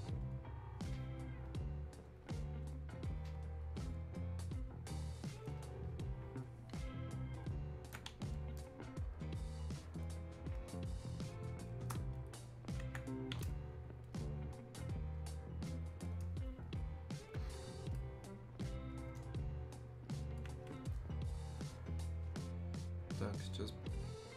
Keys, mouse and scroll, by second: 22.4 click.